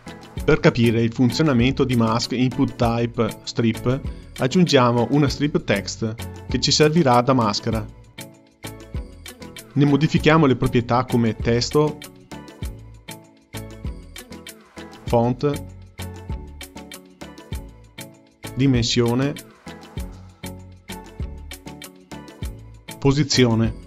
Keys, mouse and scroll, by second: 0.0 click, 2.2 shift+a, 6.2 click, 9.0-12.4 drag, 14.9-17.9 drag, 18.7-20.5 drag, 20.5 KP_0, 23.1-23.8 drag.